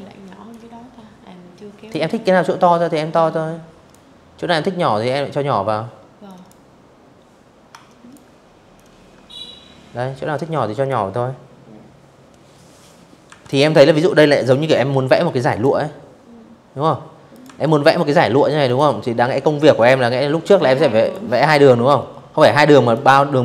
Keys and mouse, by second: 0.6 click, 3.9 click, 5.3 ctrl+click, 6.4-8.5 ctrl+drag, 10.9 v, 11.1 click, 13.1 click, 15.0 click, 15.1 v, 16.3 click, 16.8 p, 18.7 click, 19.5-20.6 drag, 23.3 ctrl+z.